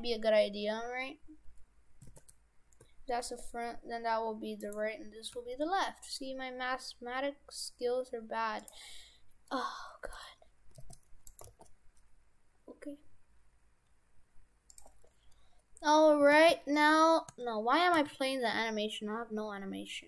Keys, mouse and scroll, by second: 2.1 shift+f, 5.4 g, 8.9-9.5 scroll up 5, 9.5 middle click, 10.7 g, 11.4 g, 15.2-16.2 scroll down 1, 16.2 scroll down 1, 16.2 x, 16.4 space, 17.4 space, 18.0 s.